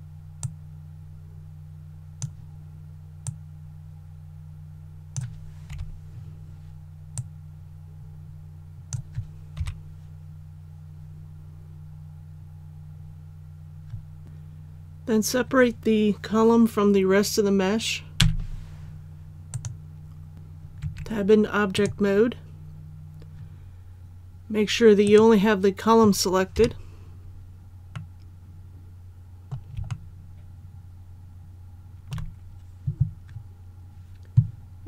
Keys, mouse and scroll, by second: 5.7 KP_7, 7.2-9.2 drag, 9.6 KP_1, 12.4 scroll down 1, 18.2 p, 19.5 click, 20.8 Tab, 21.8 right click, 26.6 KP_7, 28.0-29.8 middle drag, 29.9-32.1 shift+middle drag.